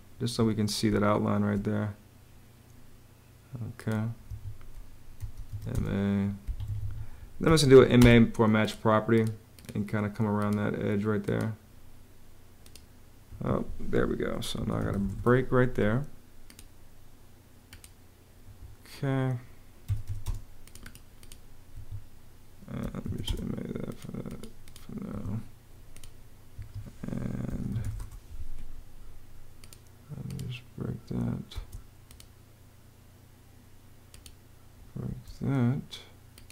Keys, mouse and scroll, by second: 0.7 space, 4.1 Escape, 5.0 m, 5.3 a, 5.5 space, 6.2 Escape, 7.2 m, 7.6 a, 7.8 space, 13.1 Escape, 14.1-15.3 typing, 18.2 Escape, 19.4-20.3 typing, 21.5 Escape, 22.4-23.3 typing, 24.9 Escape, 26.3 Escape, 27.3 b, 27.7 k, 27.8 Return, 31.3 space, 34.8 space.